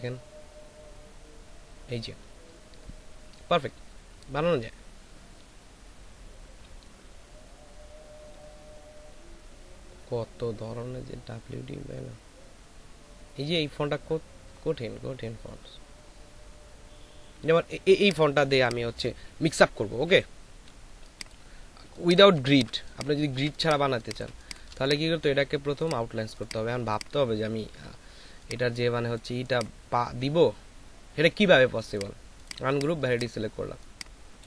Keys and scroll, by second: 21.8 space, 32.6 space, 33.6 ctrl+space.